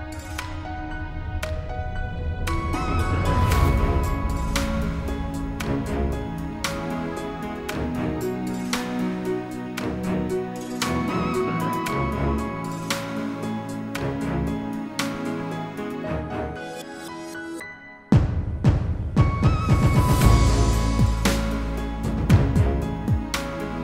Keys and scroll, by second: 9.6 ctrl+d.